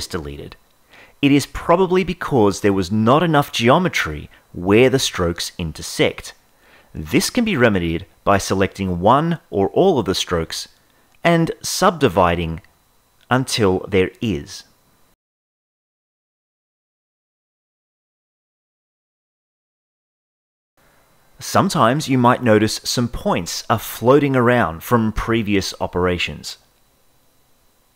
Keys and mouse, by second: 0.5 ctrl+z, 3.0-4.4 drag, 10.9-13.1 right drag, 13.9 Tab, 14.8 click, 21.5-23.9 drag.